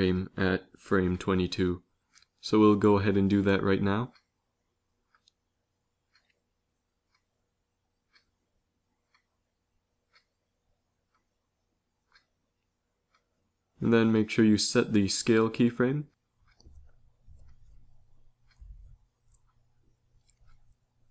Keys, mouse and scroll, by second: 5.0 Left, 6.7 s, 13.6 ctrl+c, 14.3 ctrl+v, 14.9 ctrl+v, 17.1 i.